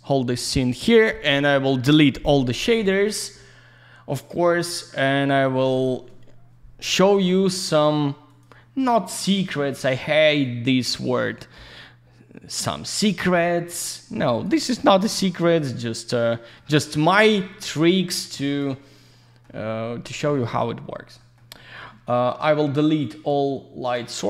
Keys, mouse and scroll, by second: 8.3 click, 8.9 alt+middle click, 10.4 click, 13.2 middle click, 14.3 click, 15.0 alt+middle click, 16.7 middle click, 17.2 alt+z, 17.4 click, 17.9 alt+middle click, 18.3 alt+z, 18.4 click, 18.7 alt+middle click, 21.2 middle click, 23.0 click, 23.8 click.